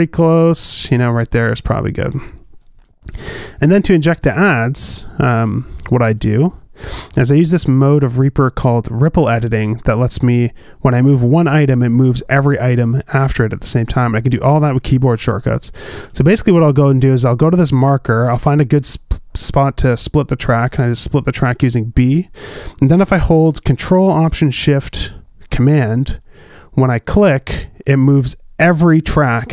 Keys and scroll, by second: 2.4 space, 22.1 b.